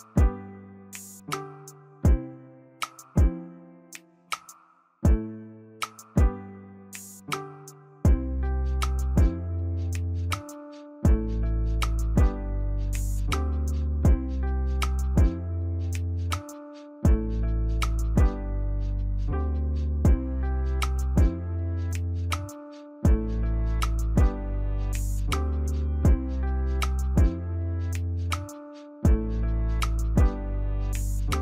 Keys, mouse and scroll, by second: 5.8 ctrl+-, 6.1 ctrl+-, 7.8 Left, 8.1 Right, 9.2 Right, 9.4 ctrl+-, 16.8 Down, 17.5 Left, 18.4 Right, 18.6 Right, 19.2 Right, 23.1 ctrl+click.